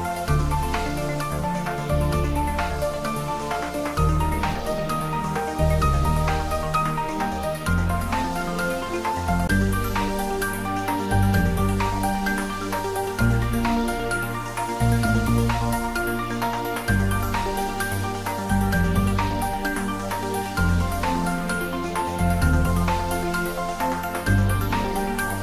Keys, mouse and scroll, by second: 1.8 scroll up 1, 3.1 3, 3.9 scroll down 1, 8.9 click, 9.2-10.2 typing, 14.0 click, 14.5 scroll down 1, 15.6 scroll up 1, 17.2-18.2 typing, 20.3 click, 20.8 s, 25.1 click.